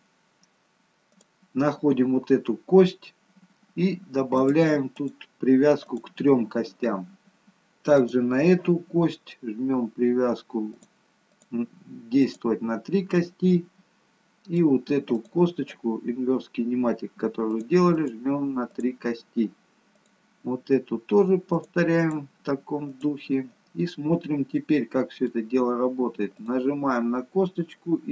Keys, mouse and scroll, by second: 1.1 click, 4.3 click, 4.8 click, 8.0 click, 10.7 click, 11.3 click, 12.2 click, 13.1 middle click, 15.1 click, 17.4 click, 18.4 click, 18.7 click, 19.9 click, 22.0 click, 22.9 click, 23.9 scroll down 2, 24.7 middle click, 24.7 scroll down 1, 26.4 click.